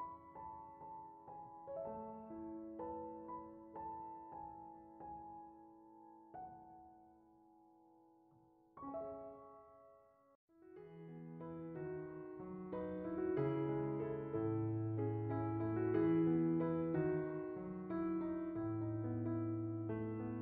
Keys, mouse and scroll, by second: 2.3-3.1 drag, 4.3 click, 5.2 ctrl+shift+click, 9.4-10.4 drag, 11.6 click, 17.6 click, 18.8 click, 20.0-20.4 drag.